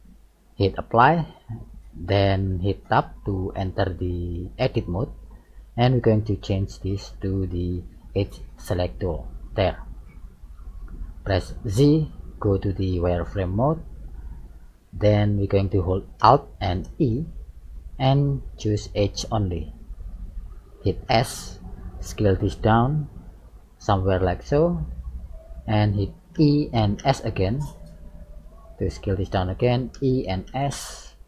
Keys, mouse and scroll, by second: 0.8 click, 1.7 middle click, 2.9 Tab, 3.7-4.6 scroll up 4, 9.0 click, 10.2 middle click, 11.7 z, 13.0 middle click, 16.9 alt+e, 26.3 e.